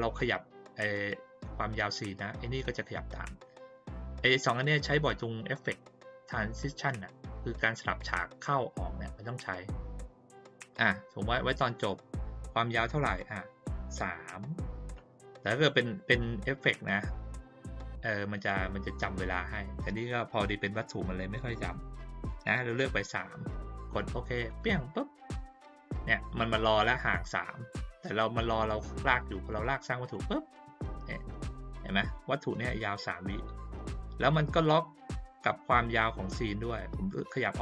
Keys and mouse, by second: 10.3 click, 13.1 click, 24.4 click, 29.5 click, 32.0 click, 36.9-37.6 drag.